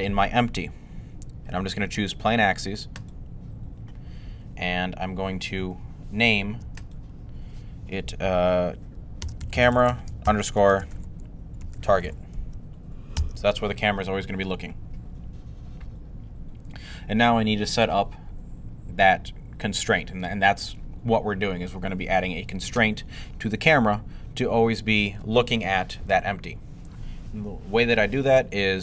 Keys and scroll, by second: 8.8-12.2 typing.